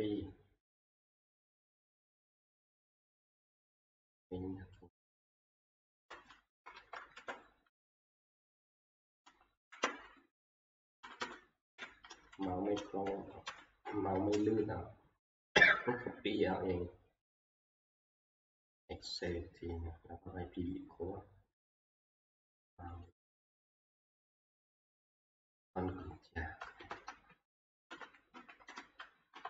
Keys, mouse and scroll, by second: 1.6 click, 3.9 click, 4.7 click, 5.6 click, 6.5 Left, 6.7 Left, 7.1 ctrl+shift+End, 7.9 ctrl+v, 9.7 End, 11.7 End, 13.5 Home, 14.3 ctrl+c, 19.0 click, 20.7 click, 23.1 click, 24.2 ctrl+v, 26.0 click, 26.8 Left, 27.1 ctrl+Down, 27.9 ctrl+shift+Up, 28.3 Down, 28.7 Delete, 29.3 Right.